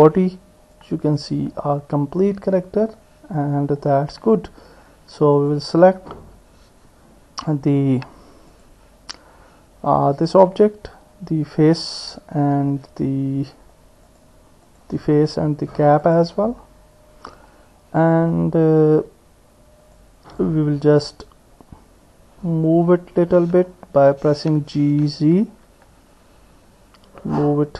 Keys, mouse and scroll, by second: 0.7 click, 5.1 Tab, 6.1 Tab, 8.5 click, 14.1 click, 16.0 shift+click, 19.9 click, 24.9 g.